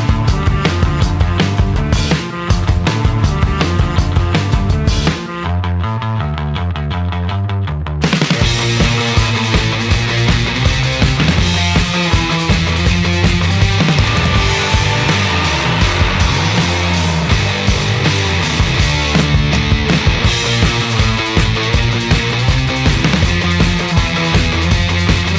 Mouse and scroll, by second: 1.7 click, 3.1 click, 6.2 click, 7.7 click, 9.0-10.9 drag, 11.9 click, 13.4 click, 14.8 click, 16.6 click, 17.3 click, 18.6-19.7 drag, 20.2-21.6 right drag, 22.8-24.1 drag, 25.0 click.